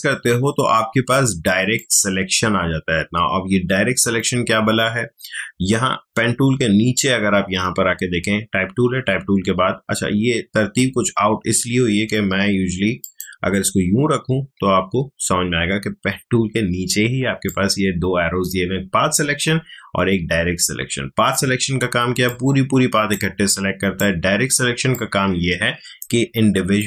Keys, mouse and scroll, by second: 1.7-13.0 ctrl+drag, 17.4-26.8 drag.